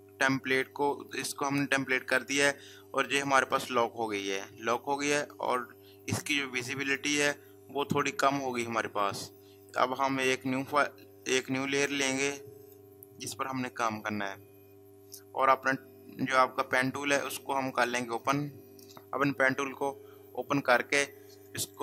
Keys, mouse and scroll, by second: 12.6 click, 18.2 click.